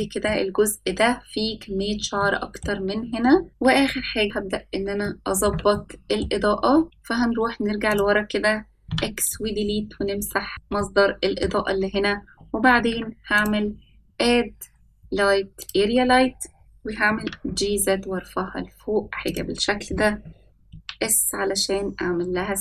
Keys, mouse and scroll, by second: 1.3 middle click, 3.5 ctrl+s, 4.6-4.9 scroll down 1, 6.4-6.8 shift+middle drag, 7.7-8.0 scroll down 2, 8.3-8.6 scroll down 2, 9.3 click, 10.3 x, 10.5 scroll up 3, 10.6 middle click, 13.1 ctrl+s, 13.2-17.0 drag, 17.0 g, 20.5 s.